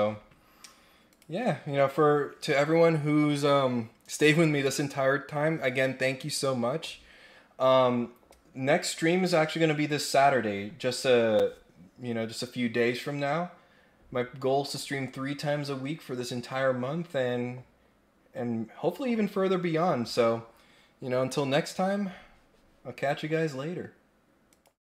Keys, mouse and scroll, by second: 1.1 click.